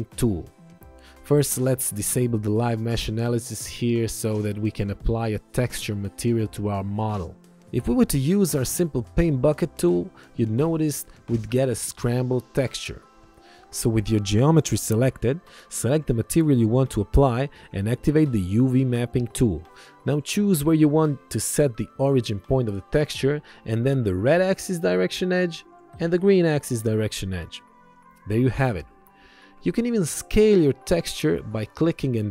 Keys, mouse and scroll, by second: 12.3 ctrl+1, 12.4 click, 13.7 click.